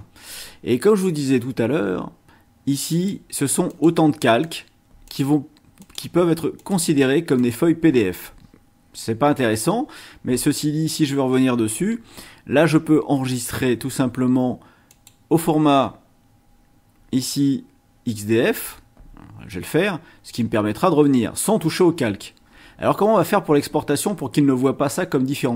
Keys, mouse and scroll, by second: 1.3-1.7 scroll up 1, 2.9 click, 3.7 click, 4.4 click, 5.0 click, 5.8 click, 6.5 click, 7.3 click, 9.3 scroll up 1, 13.3 click, 14.9 click, 19.5 click.